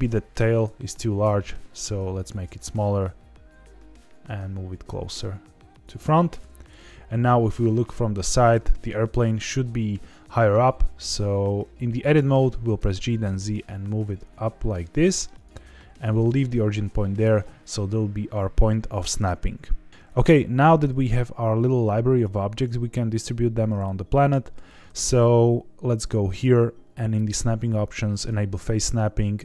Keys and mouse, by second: 0.2 1, 0.6 click, 1.2 s, 2.3 click, 2.7 g, 2.9 x, 5.7 click, 6.6 KP_1, 7.8 shift+middle click, 8.5 a, 12.7 g, 12.9 z, 15.3 click, 15.5 g, 16.0 click, 17.1 Tab, 18.2-18.7 middle drag, 19.0 shift+middle drag, 19.3 z, 19.5 z, 20.3-20.7 shift+middle drag, 23.8 middle click, 26.4-29.4 drag.